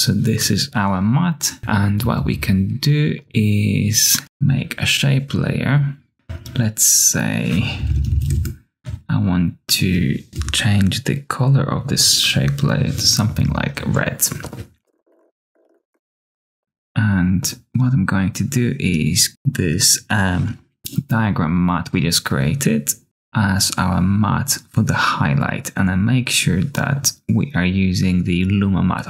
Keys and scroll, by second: 1.9 q, 2.1 q, 2.2 q, 4.2 q, 7.7-8.6 typing, 10.0 Return, 12.1 BackSpace, 14.8 Return, 14.9-16.3 typing, 16.6 super+a.